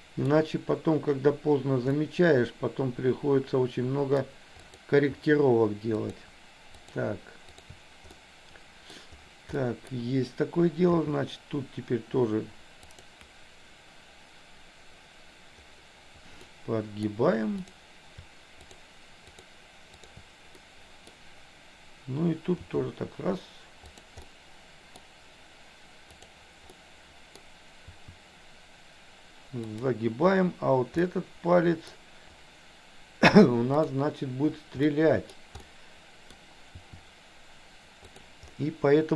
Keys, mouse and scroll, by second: 1.9-4.1 middle drag, 4.7 click, 6.0 shift+click, 6.8 shift+click, 8.2 middle click, 9.6 middle click, 11.0 r, 16.4 middle click, 18.8 shift+click, 19.3 shift+click, 19.9 shift+click, 20.7 middle click, 22.6 r, 24.1 middle click, 26.7 middle click, 27.9 r, 31.1 middle click, 33.9 click, 34.9 middle click, 35.6 middle click, 36.8 r.